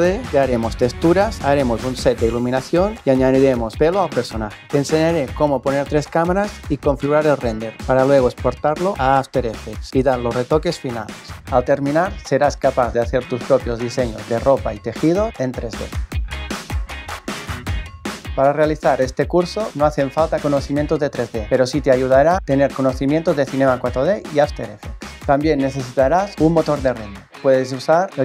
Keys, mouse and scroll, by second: 9.9 click, 11.2 click, 12.0 Return, 12.3 click.